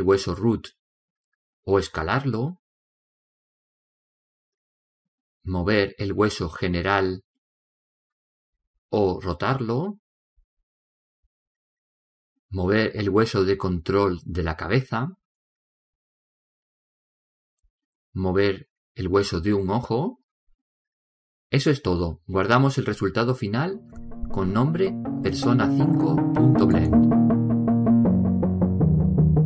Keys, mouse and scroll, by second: 0.4 g, 2.6 s, 3.9-5.3 middle drag, 4.7 right click, 6.6-7.9 middle drag, 7.0 g, 9.3 r, 10.8-14.4 right drag, 14.0 g, 16.0 right click, 17.1 r, 20.2 right click, 21.4 r, 22.6-24.7 middle drag, 28.2-29.4 drag.